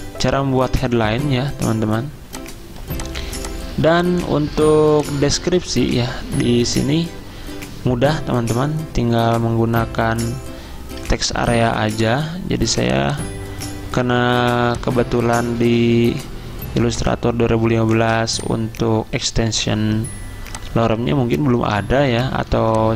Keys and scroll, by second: 3.2 z, 11.4 super+m.